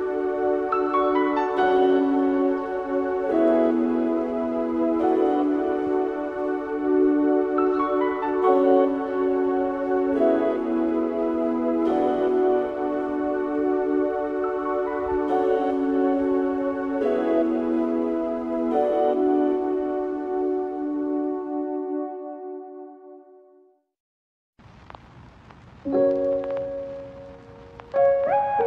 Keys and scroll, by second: 5.3 Tab, 7.2 F2, 11.7 Delete, 16.3 Tab.